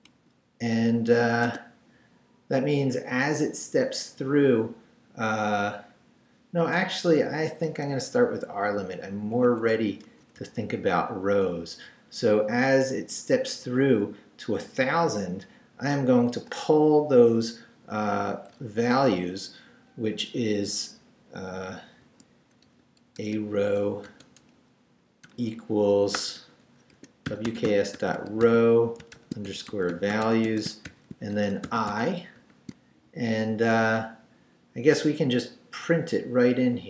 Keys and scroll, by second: 0.0 shift+Return, 0.6 Return, 1.4 Tab, 7.4 Up, 7.6 Right, 9.5 Right, 10.0 BackSpace, 10.4 r, 11.3 Down, 22.0-24.0 typing, 25.2-32.4 typing.